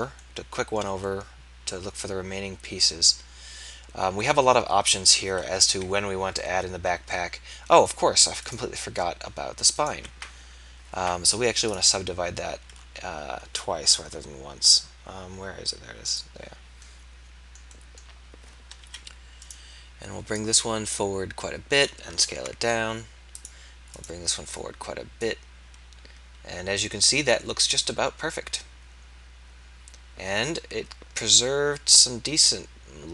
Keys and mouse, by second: 5.6 KP_3, 16.3-18.8 drag, 18.8 KP_3, 22.3 ctrl+a.